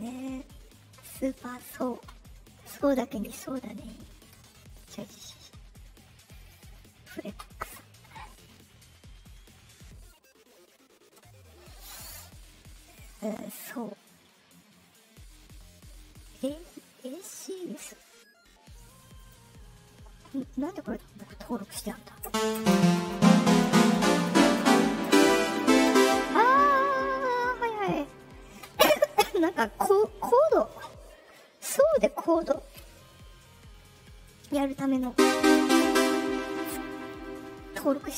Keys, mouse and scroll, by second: 4.6 click, 6.7-7.0 drag, 10.0 click, 19.1 click, 20.9-21.7 drag.